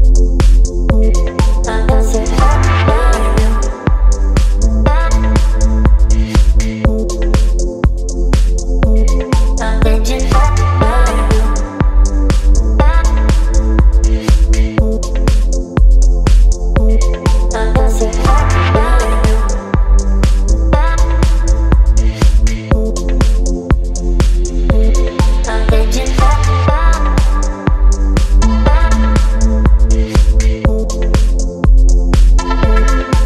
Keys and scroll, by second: 4.6 Return, 8.2 Left, 8.3 Left, 8.8 Down, 8.9 Down, 9.6 Down, 10.2 Down, 10.3 Down, 14.8 ctrl+t, 17.1 ctrl+z, 17.8 Return, 20.3 ctrl+t, 21.3 Up, 23.7 Down, 23.8 Down, 23.9 Down, 24.9 Up, 25.0 Up, 25.1 Up, 25.2 Up, 25.6 Return, 29.2 ctrl+t, 32.6 Up, 32.7 Up, 32.8 Up, 32.9 Up.